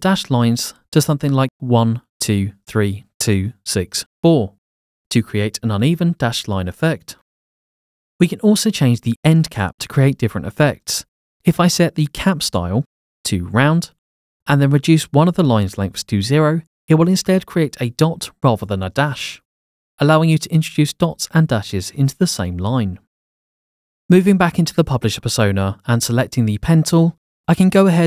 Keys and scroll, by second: 1.0-3.9 typing, 1.3 Tab, 2.2 Tab, 2.7 Tab, 3.2 Tab, 3.8 Tab, 5.1 Tab, 16.9 0, 18.7 Return.